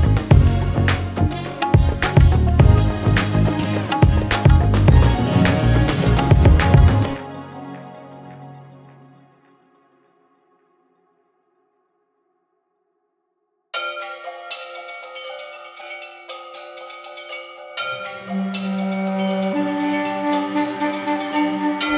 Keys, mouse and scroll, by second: 0.5-1.4 scroll up 4, 2.9-3.7 drag, 5.9-6.7 drag, 7.4-9.3 drag, 9.6-10.9 drag, 12.4-14.0 drag, 14.0-14.6 scroll down 16, 14.6-15.0 drag, 15.6 space, 16.9 space, 17.1-17.4 scroll up 2, 17.4-21.9 drag, 20.9-21.8 scroll up 5.